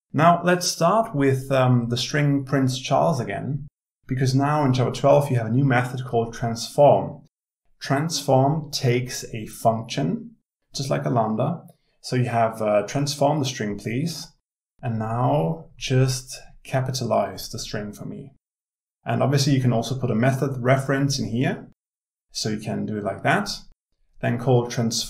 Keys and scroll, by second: 0.0 ctrl+w, 1.3 ctrl+c, 2.6 ctrl+v, 18.6 alt+Return.